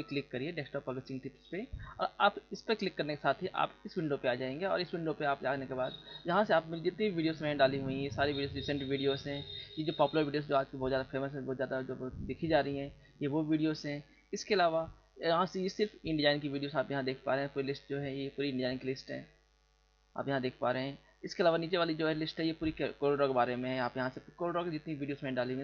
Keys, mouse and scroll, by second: 3.5 click, 4.8 scroll down 1, 5.4-5.7 scroll down 2, 7.1 click, 7.5 click, 9.1-9.4 scroll down 2, 13.8 scroll down 1, 17.0 click, 18.0 click, 19.7 click, 20.0 click, 20.3 click, 20.5 click, 21.1-21.4 scroll down 2, 24.3 click.